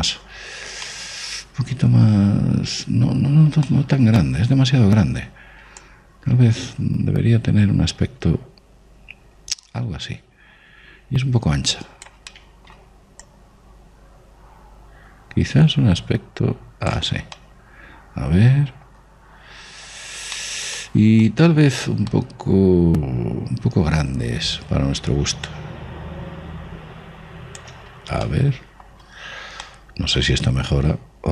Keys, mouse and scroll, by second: 1.1-1.7 scroll up 1, 1.7-4.1 middle drag, 4.1 scroll down 1, 4.4 scroll up 1, 4.5-7.0 middle drag, 6.7 click, 13.1 middle click, 14.1 click, 18.0-25.9 middle drag, 22.1 click, 26.3 click, 29.1-31.3 middle drag.